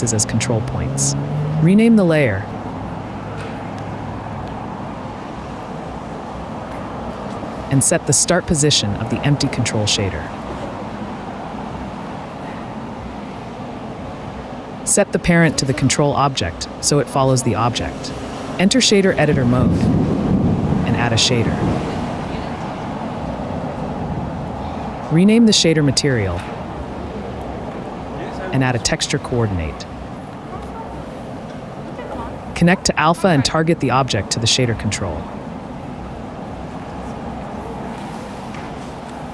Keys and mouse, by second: 2.7 click, 3.2-5.7 drag, 5.7 Tab, 5.9-7.7 drag, 8.2 s, 9.1 click, 10.4 g, 11.9 KP_Decimal, 12.9 g, 13.0 z, 17.2 ctrl+p, 18.5 click, 19.0 click, 19.4-20.2 drag, 22.4 click, 24.6 click, 26.3 click, 30.3 shift+a, 33.1 click, 33.8 click, 35.7 click.